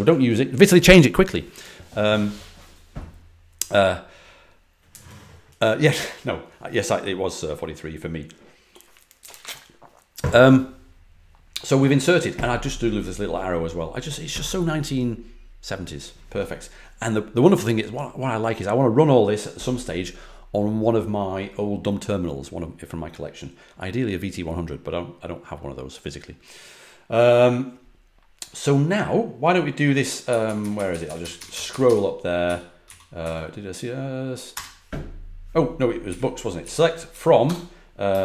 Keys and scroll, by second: 30.2 Up, 30.4 Up, 30.5 Up, 30.7 Up, 30.8 Up, 31.0 Up, 32.4 Down, 32.8 Down, 33.1 Down, 34.4 Return, 36.0 Up, 36.5 Left, 37.0 Left, 37.4-38.2 typing.